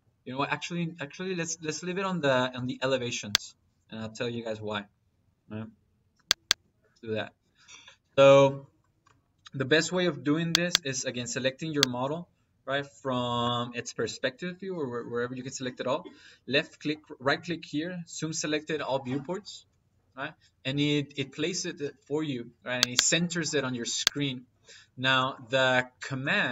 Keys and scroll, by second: 1.7 F7, 3.4 F7.